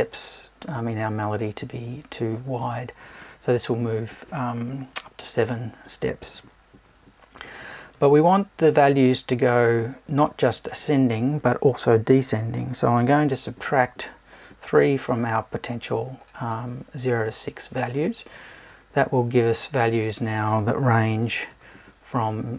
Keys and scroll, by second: 21.5 Tab.